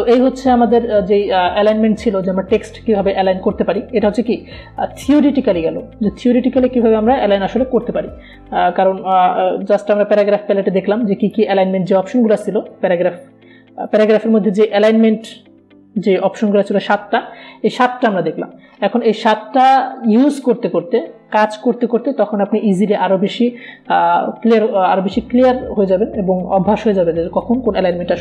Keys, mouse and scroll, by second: 9.9 click, 10.0 click, 11.4 Delete, 12.6 click.